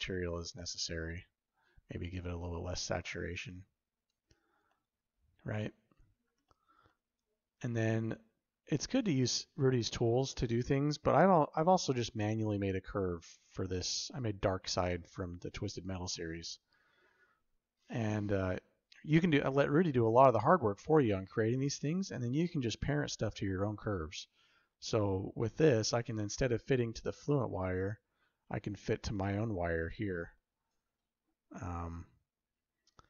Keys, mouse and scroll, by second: 4.6-5.8 shift+middle drag, 6.3 middle click, 6.8 shift+middle click, 8.0 middle drag, 9.9-10.7 shift+middle drag, 12.3-14.1 shift+middle drag, 14.7 middle click, 15.6 middle click, 16.0-16.3 shift+middle drag, 20.6 middle click, 20.7 drag, 20.7 right drag, 21.7-22.0 middle drag, 23.3-23.7 drag, 23.5 right click, 23.7 middle drag, 23.9 click, 27.5 click, 30.2-33.0 shift+middle drag.